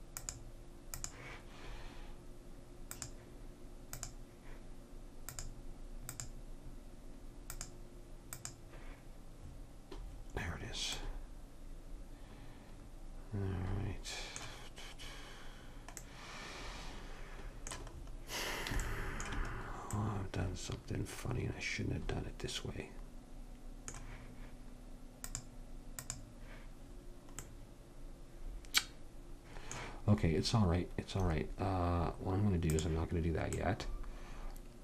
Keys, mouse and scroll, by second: 3.0-4.9 drag, 5.3-7.2 drag, 7.6-9.4 drag, 9.5 middle click, 25.3-27.1 drag, 27.1-29.2 middle drag, 32.7-34.6 drag, 34.6 middle click.